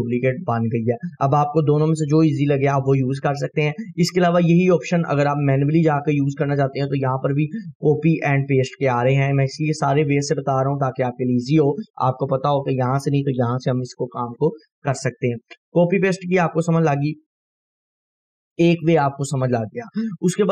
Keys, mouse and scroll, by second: 5.7 click, 9.5 click.